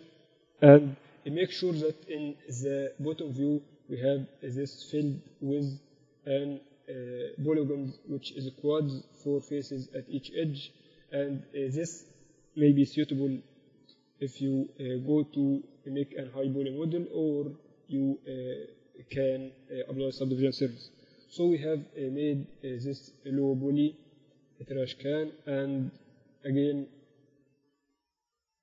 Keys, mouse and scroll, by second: 1.4 j, 4.8-6.9 drag, 5.3-6.5 right drag, 6.9-11.8 right drag, 11.8-13.3 middle drag, 13.3-19.7 typing, 21.2 KP_1, 22.0 Tab, 22.5 Tab, 23.2 z, 23.7 z.